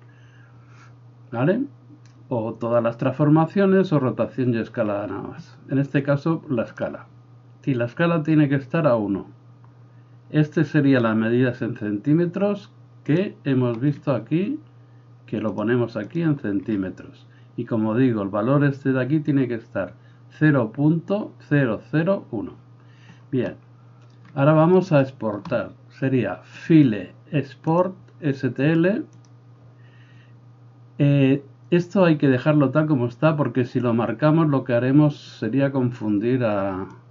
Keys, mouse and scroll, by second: 13.1 click, 13.3-15.5 middle drag, 15.5 click, 16.2-26.6 middle drag, 26.7-37.1 drag.